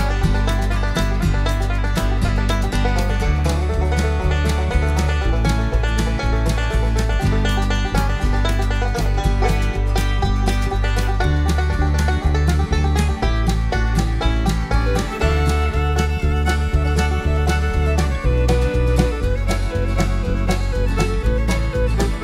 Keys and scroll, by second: 1.1 ], 13.6 b, 14.5 [, 20.5 space.